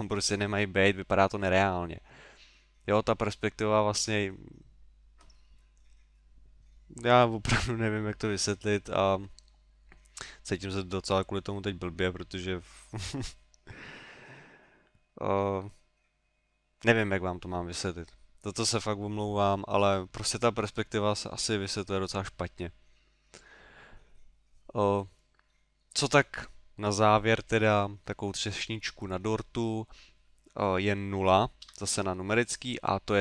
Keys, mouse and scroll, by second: 25.0 middle click, 25.5 middle click, 31.7 KP_0.